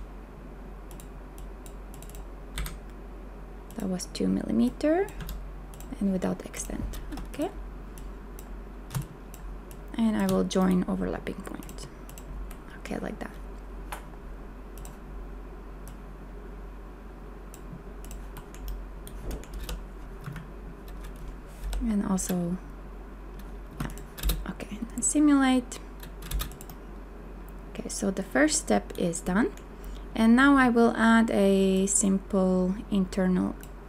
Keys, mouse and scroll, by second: 2.6 KP_1, 5.2 KP_2, 9.0 shift+click, 19.6 b, 20.2 a, 21.8 m, 23.7 a, 24.2 space.